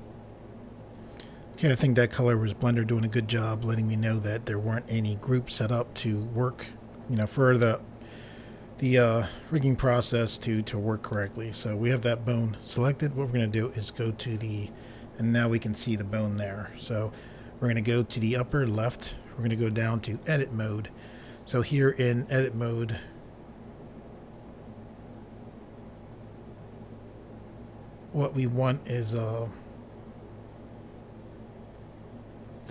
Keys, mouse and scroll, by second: 7.6 middle click, 19.1 click, 20.1 click.